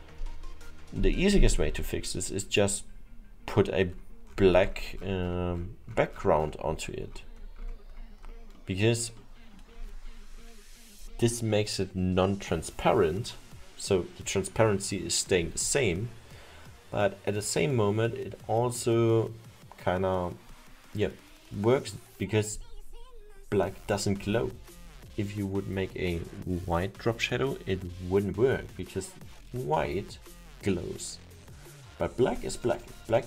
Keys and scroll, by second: 8.8 alt+7.